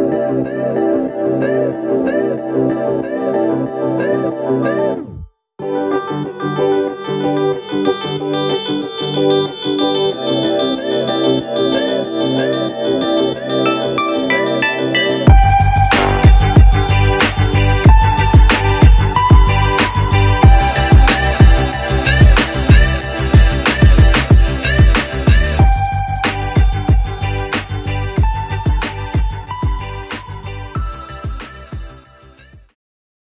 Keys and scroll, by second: 12.5 v, 23.9 Return, 27.7 Return.